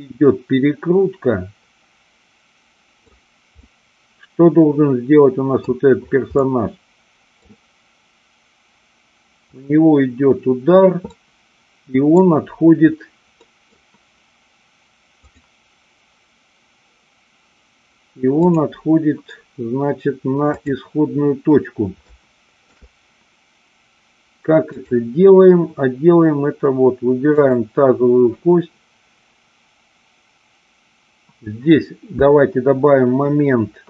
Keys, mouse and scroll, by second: 3.7-5.6 middle drag, 6.3-7.4 middle drag, 11.2-12.0 middle drag, 13.4 middle click, 15.2 click, 18.4 click, 20.6 click, 22.0-22.7 shift+middle drag, 27.3-28.6 drag.